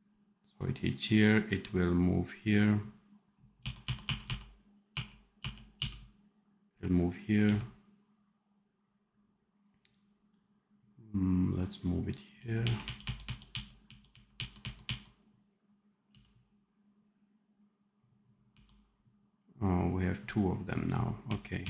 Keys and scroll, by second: 3.5 r, 5.6 f, 7.3 r, 12.2 r, 13.4 r, 14.0 r, 14.5 r, 16.0 f, 18.4 r, 21.1 r.